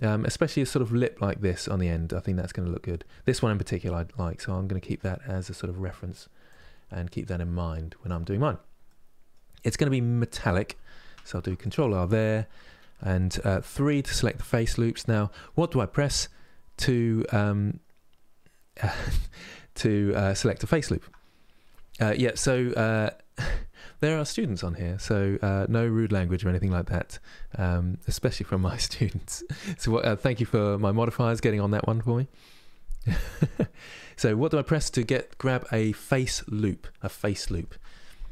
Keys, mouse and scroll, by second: 8.5 middle click, 9.4-10.9 scroll up 2, 10.9 ctrl+r, 12.2 3.